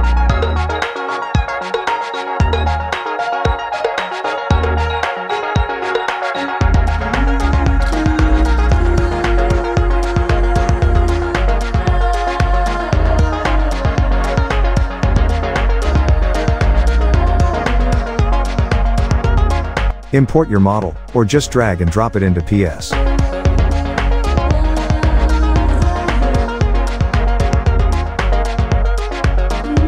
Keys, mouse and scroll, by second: 2.2-4.0 drag, 4.0-7.2 drag, 8.3 click, 10.0 click, 11.4-13.6 drag, 13.6-16.3 drag, 20.3-23.2 drag, 27.8 alt+scroll down 1, 28.8-29.7 drag.